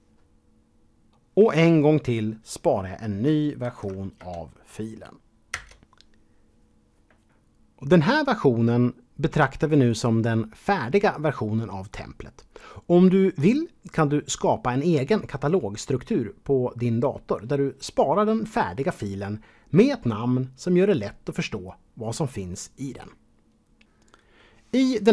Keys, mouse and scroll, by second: 0.0 Return, 3.6 ctrl+shift+s, 4.2 KP_Add, 5.5 Return.